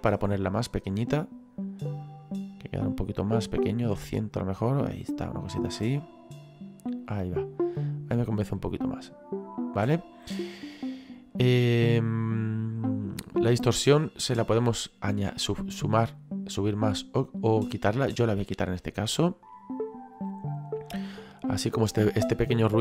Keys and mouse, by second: 8.6 middle click, 13.8 click, 20.1 click.